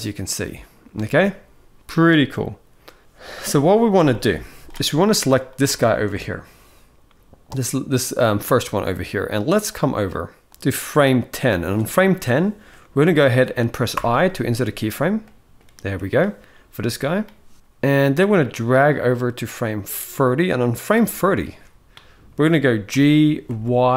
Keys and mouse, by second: 0.7 space, 3.4-4.4 drag, 5.2 click, 5.6 shift+middle drag, 8.6 middle click, 9.3-10.2 drag, 10.5 click, 12.4 middle click, 13.6 i, 14.9 middle click, 18.1-20.6 drag, 21.1 shift+middle drag, 22.6 g.